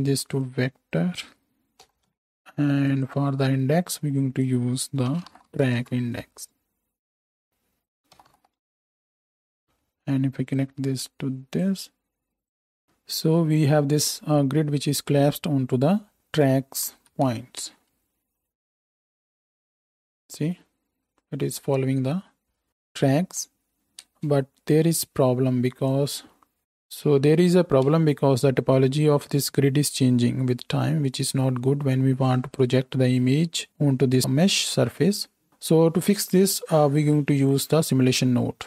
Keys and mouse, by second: 3.0-4.1 middle drag, 4.1-16.5 drag, 12.8-16.5 right drag, 16.9 shift+Right, 17.0 shift+Left, 17.6 space, 24.2 space, 27.9 space, 35.5 space.